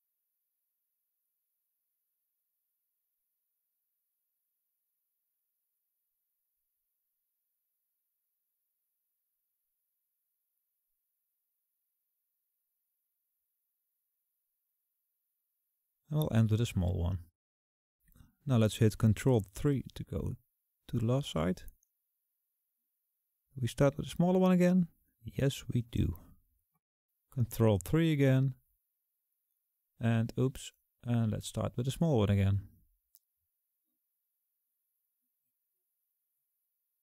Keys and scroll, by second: 0.3 ctrl+z, 20.6 ctrl+KP_3, 28.0 ctrl+KP_3.